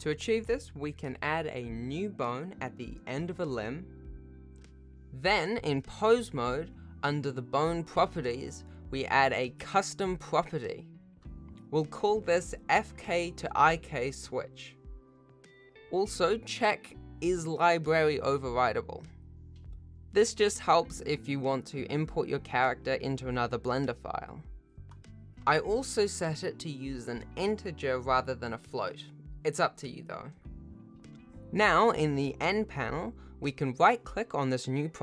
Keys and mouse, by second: 0.3 click, 1.1-3.6 typing, 1.7 click, 4.3 F2, 6.3 ctrl+Tab, 10.7 click, 12.6 click, 13.3-24.6 drag, 17.8 BackSpace, 20.6 BackSpace, 20.7 BackSpace, 25.7-28.0 drag, 28.6 click, 32.1 n.